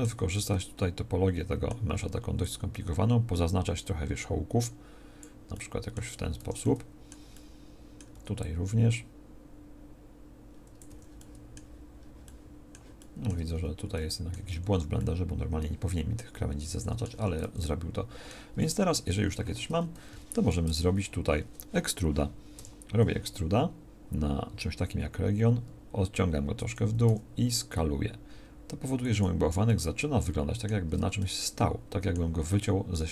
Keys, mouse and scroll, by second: 1.9 c, 8.1 c, 13.5 z, 14.5 c, 19.5 Tab, 20.6 Tab, 22.6 e, 27.0 s, 30.8 Tab.